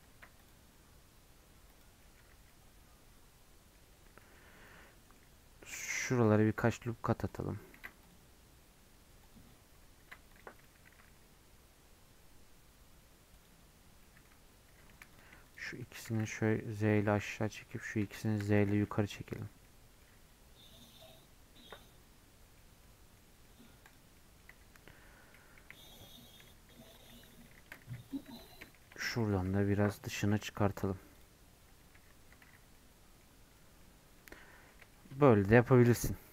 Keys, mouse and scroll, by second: 21.9 middle click, 22.9 middle click, 24.3-26.1 middle drag, 35.7-36.3 middle drag.